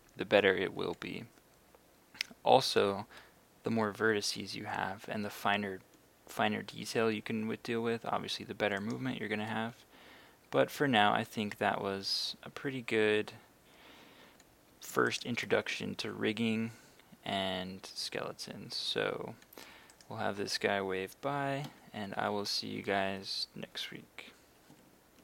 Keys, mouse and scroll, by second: 0.5 Escape, 8.8 right click, 9.5 r, 13.9 Escape, 15.1 shift+right click, 15.7 shift+r, 19.0 Escape, 20.0 right click, 21.7 r.